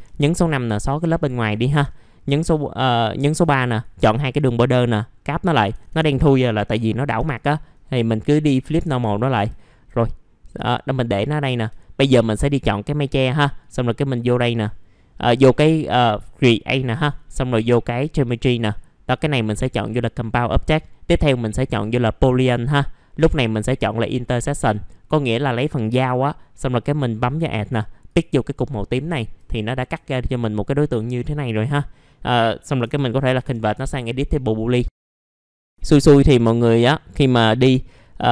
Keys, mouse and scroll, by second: 0.3 click, 0.9 Delete, 1.4 middle click, 3.5 click, 4.2 right click, 5.3 click, 6.3 middle click, 7.3 click, 7.7 right click, 8.5 click, 9.3 scroll down 1, 9.6 alt+middle click, 10.5 click, 11.8 alt+middle click, 12.4-27.8 drag, 29.0 alt+middle click, 29.5-29.9 scroll up 1, 30.0 alt+middle click, 34.4-34.7 scroll up 1, 34.8 alt+middle click, 35.0 alt+middle click, 35.8 alt+middle click, 36.9-37.2 scroll up 1.